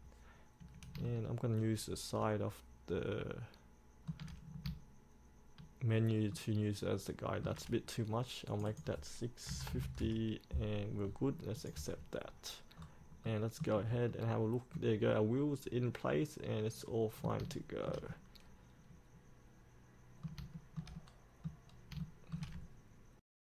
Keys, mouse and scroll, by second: 1.2-4.3 shift+middle drag, 6.6 shift+middle click, 8.7 click, 9.7 KP_6, 11.7 click, 12.9-13.4 scroll up 1, 13.4-17.5 middle drag, 17.8 shift+middle click, 18.3-20.5 middle drag, 20.7 shift+middle click, 21.9 scroll down 1, 22.2 shift+middle click.